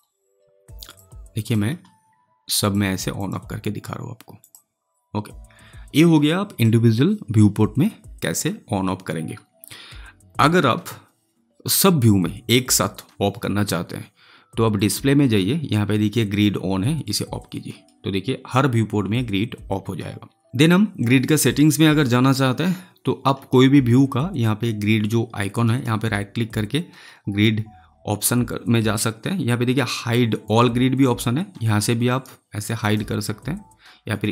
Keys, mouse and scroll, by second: 5.4-7.2 scroll down 1, 14.7 click, 17.0 click, 20.4 click, 25.6 right click, 32.0 right click, 32.7 click.